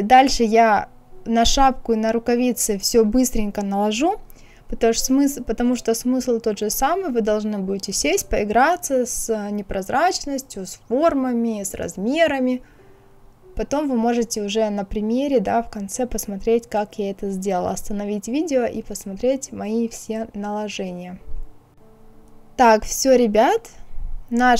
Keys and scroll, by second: 0.1 ctrl+f, 2.1 KP_0, 3.8 Delete, 4.0 ctrl+z, 4.3 KP_5, 4.4 Return, 5.4 Return, 5.6 KP_1, 5.7 KP_5, 9.8 Return, 10.8 ctrl+c, 10.9 ctrl+f, 11.5 ctrl+c, 13.8 KP_6, 13.9 Return, 16.6 Return.